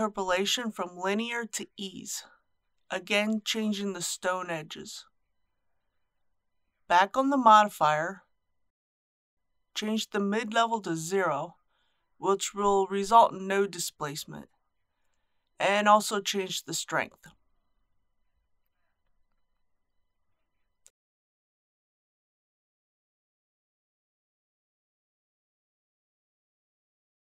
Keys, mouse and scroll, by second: 3.3-13.3 drag, 17.1 KP_Decimal, 17.3 KP_2, 19.7-25.3 middle drag.